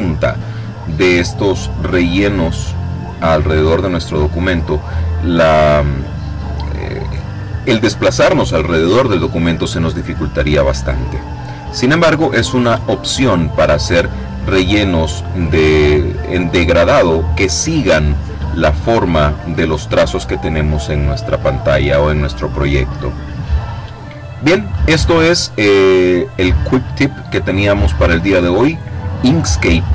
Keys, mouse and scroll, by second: 11.3-11.8 scroll up 2, 12.2-12.7 scroll up 2, 29.1 click.